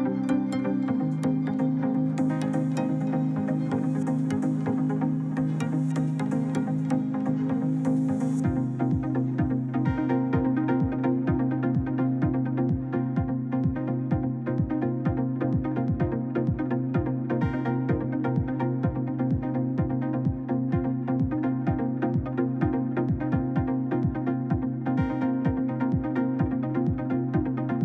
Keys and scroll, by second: 5.4 Escape, 7.7 ctrl+z, 10.0 ctrl+z, 12.5 2, 14.6 2, 15.2 Return.